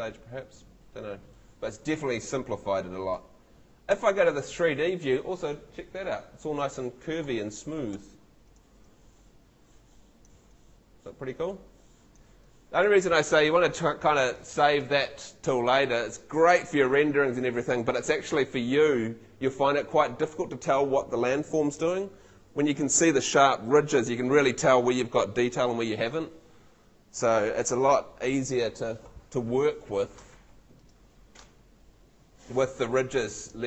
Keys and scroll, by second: 3.9 F3, 30.3 Escape.